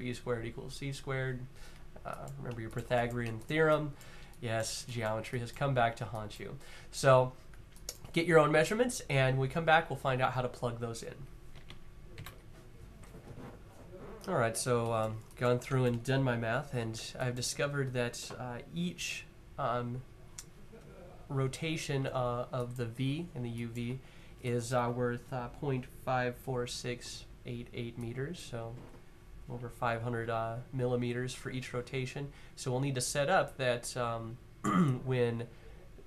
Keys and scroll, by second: 11.8 super+z.